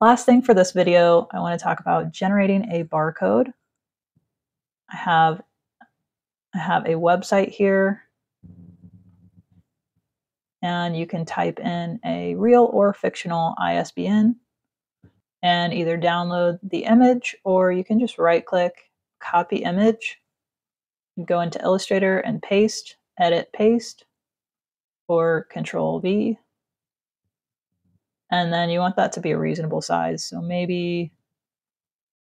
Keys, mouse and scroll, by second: 1.2 click, 8.9 click, 11.4 click, 12.1 click, 15.0 click, 17.0 right click, 18.9 click, 20.2 click, 22.8 click, 24.1 click, 25.4 click, 28.3 shift+click, 31.0 shift+click.